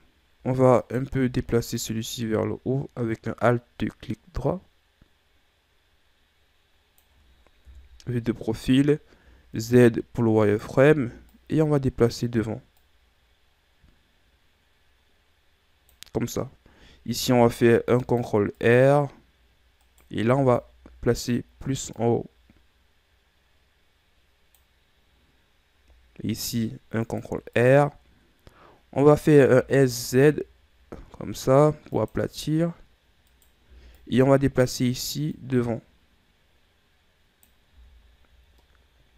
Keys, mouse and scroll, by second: 1.0-2.0 alt+right drag, 2.0-5.1 drag, 7.9 KP_3, 9.4 z, 10.7 right click, 11.1 b, 13.0-16.1 drag, 17.4 ctrl+r, 20.1 right click, 20.5 b, 22.1-25.2 drag, 26.6 ctrl+r, 28.7-29.8 scroll up 2, 29.8 s, 33.5 right click, 33.9 b, 35.6-38.0 drag, 38.0 z, 38.3-38.8 scroll down 5, 38.8-39.1 middle drag.